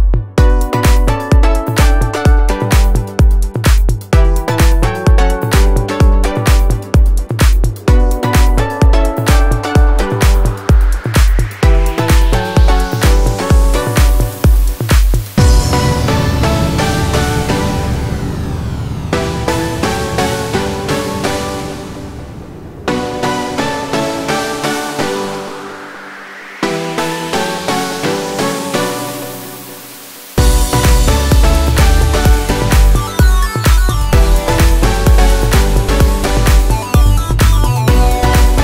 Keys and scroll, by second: 1.5 space, 3.1 ctrl+r, 7.0 ctrl+r, 7.6 F3, 10.0 F4, 10.6 Escape, 15.8 space, 29.5 F3, 30.6 Escape, 33.7 alt+c, 34.1 p, 35.3 alt+c, 35.3 alt+w, 35.7 p, 38.4 F2.